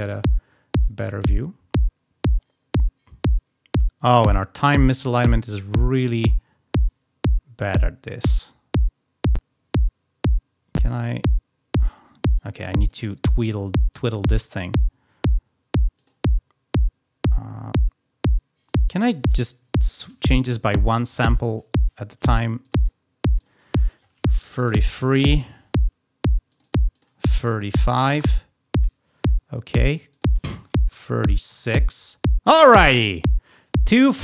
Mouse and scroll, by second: 0.8-2.7 drag, 5.5 scroll down 2, 6.3 scroll up 2, 6.9 scroll up 2, 7.6 scroll down 2, 8.3-11.7 drag, 12.7 click, 13.9 click, 14.4 click, 15.9 click, 17.4 scroll down 2, 18.6 click, 22.6 click, 23.3 click, 26.4 click, 26.9 click, 29.7 click, 30.1 click.